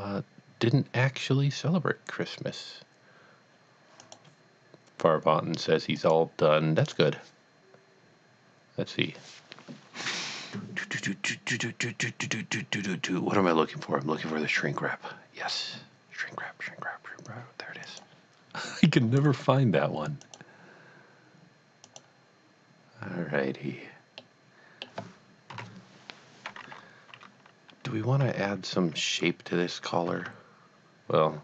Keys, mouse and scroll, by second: 4.1 click, 6.0 click, 6.8 click, 17.8 click, 21.1 click, 21.8 click, 24.2 middle click, 25.5 KP_1, 28.2 KP_1, 30.2 alt+Tab.